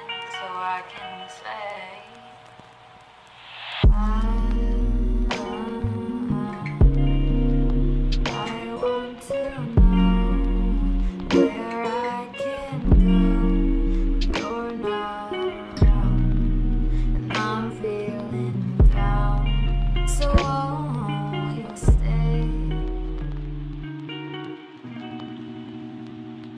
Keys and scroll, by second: 1.7 ctrl+alt+y, 4.0 c.